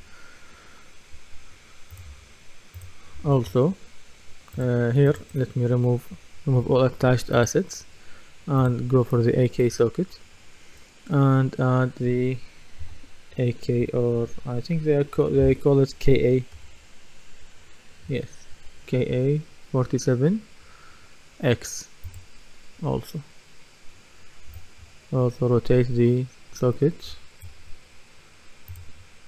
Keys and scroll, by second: 12.8 typing, 15.2-17.1 typing.